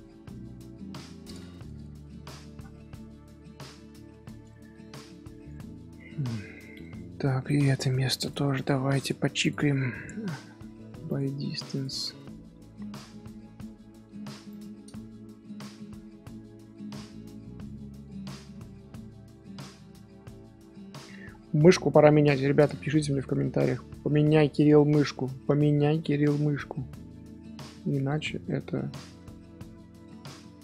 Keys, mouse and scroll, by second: 2.3-3.0 shift+middle drag, 3.0 Tab, 3.4-4.6 shift+middle drag, 4.6 scroll down 1, 4.7-6.6 scroll up 5, 5.0 middle click, 5.5 shift+middle click, 6.0 middle click, 6.6 middle click, 7.4 click, 8.5 click, 9.4 click, 9.6 middle click, 10.0 a, 11.7 click, 11.9 middle click, 12.5 g, 16.5 scroll up 1, 16.6 scroll down 2, 16.9 Tab, 17.3 scroll down 1, 17.3 scroll up 1, 17.4 scroll down 1, 17.6 scroll up 1, 17.6-18.9 middle drag, 18.9 scroll down 1, 18.9 scroll up 1, 19.3-19.8 middle drag, 19.8 scroll down 1, 19.9 scroll up 1, 19.9-20.4 scroll down 2, 21.0-22.8 middle drag, 22.8 Tab, 23.8-28.1 shift+middle drag, 28.1 scroll up 2, 28.4 shift+middle click, 28.6 scroll down 1, 28.7 scroll up 1, 28.9 scroll down 1, 29.1-30.6 middle drag.